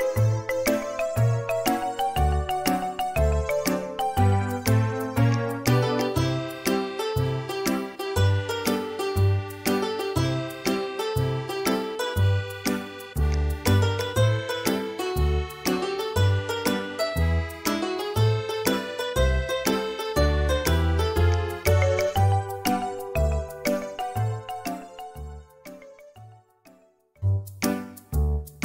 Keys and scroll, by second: 4.8 m, 8.3 Escape, 15.9 Right, 22.9 ctrl+z.